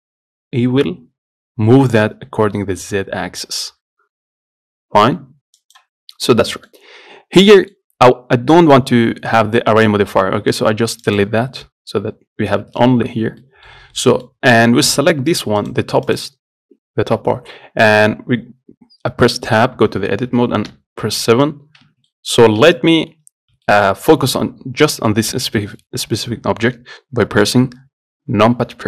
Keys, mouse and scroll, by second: 6.2 scroll down 1, 6.5-10.5 middle drag, 11.3 click, 11.9-15.6 middle drag, 15.6 click, 15.9 click, 16.3 click, 19.8 Tab, 21.0 KP_7, 21.7 scroll down 2, 22.1 Tab, 22.4 middle click, 23.1 scroll up 1, 23.9-27.8 shift+middle drag, 27.8 KP_Decimal.